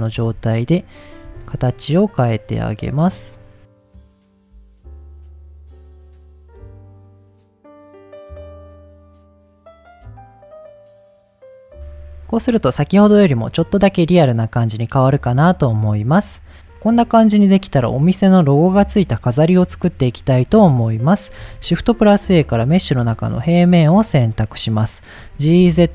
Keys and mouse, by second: 0.1 g, 0.7 click, 1.1 click, 2.7 click, 2.7 g, 3.7 click, 3.9 click, 4.1 click, 4.2 g, 4.6 click, 4.9 g, 5.3 click, 5.3 middle click, 5.7 click, 5.9 click, 6.2 g, 6.4 click, 6.6 click, 6.7 g, 6.9 click, 7.3 middle click, 7.4 Tab, 7.5 click, 7.6 middle click, 8.1 Tab, 8.4 g, 8.9 click, 9.1 h, 9.5 ctrl+z, 9.7 g, 10.2 click, 10.3 Tab, 11.3 ctrl+s, 11.4 middle click, 12.4 middle click, 13.2 middle click, 14.0 middle click, 15.4 middle click, 16.3 middle click, 16.7-17.5 middle drag, 21.5 shift+a, 24.0 click, 25.2 g, 25.4 z.